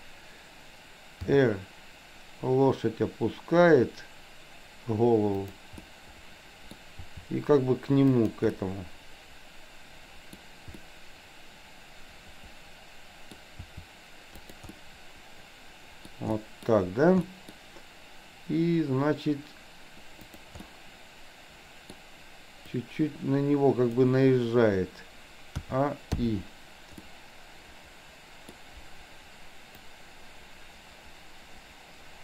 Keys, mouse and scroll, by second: 1.3 r, 5.9-7.0 middle drag, 7.0 r, 8.5-10.4 middle drag, 10.9-13.3 middle drag, 13.5 r, 14.8-16.2 middle drag, 16.4-16.8 middle drag, 17.3 middle click, 20.2-20.5 drag, 20.7-21.9 middle drag, 22.7-24.0 drag, 25.7 a, 26.2 i, 27.0-28.7 middle drag, 29.9-31.0 drag.